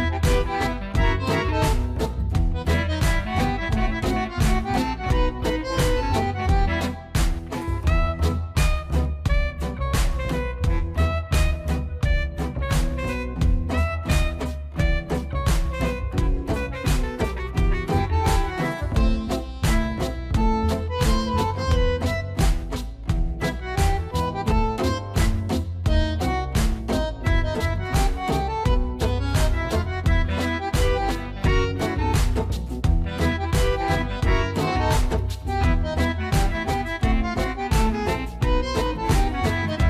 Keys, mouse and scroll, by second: 0.2 click, 1.2 middle click, 1.2-2.7 middle drag, 2.7 click, 5.5 ctrl+z, 7.9 click, 9.6-14.0 middle drag, 14.0 e, 19.5 s, 25.1 click, 25.7-28.3 middle drag, 28.3 click, 31.5 e, 32.4 y, 33.6 z, 38.0 s.